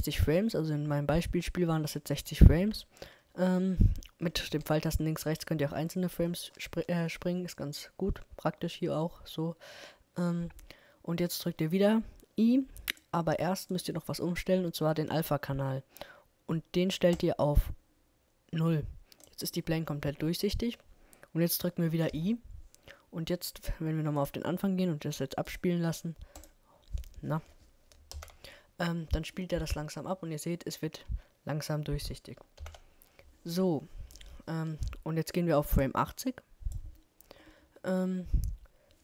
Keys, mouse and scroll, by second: 2.5 Right, 3.9-5.8 middle drag, 13.7-15.7 drag, 22.1 |, 24.1-28.4 drag, 28.2 alt+a, 32.6 alt+a, 34.1-39.0 drag.